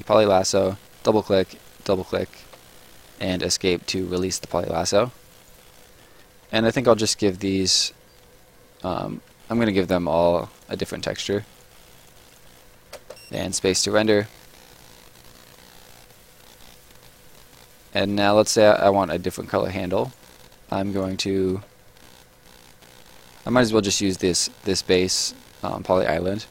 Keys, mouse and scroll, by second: 0.6 click, 1.7 click, 3.2 Escape, 4.2 right click, 7.0 click, 8.4 click, 9.3-12.9 typing, 9.6 click, 10.6 click, 10.9 click, 11.5 click, 11.9 click, 13.5 right click, 16.8 right click, 18.5 middle click, 18.9 right click, 20.9 click.